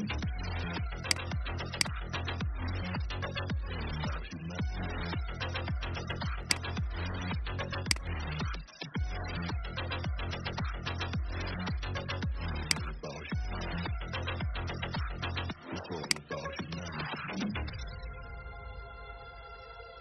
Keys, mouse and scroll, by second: 0.9 click, 1.6-2.9 typing, 6.3 click, 8.3-9.1 typing, 12.5 click, 14.0-15.9 scroll up 1, 15.9 click, 16.3 typing.